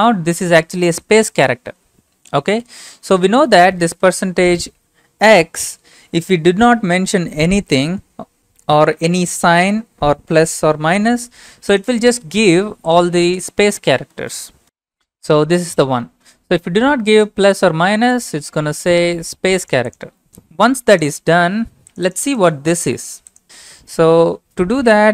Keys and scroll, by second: 2.9 alt+Tab.